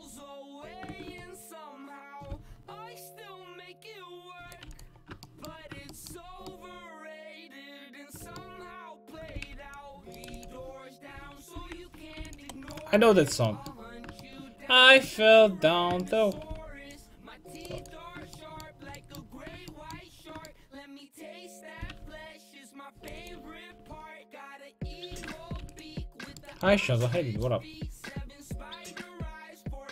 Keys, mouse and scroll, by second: 2.3 c, 4.7 x, 9.4-12.2 typing, 16.5 c, 17.8 x, 18.1-19.3 middle drag, 21.8 c, 23.1-25.1 right drag, 23.4 x, 23.9 ;, 25.2 l, 25.6 x, 26.0 click.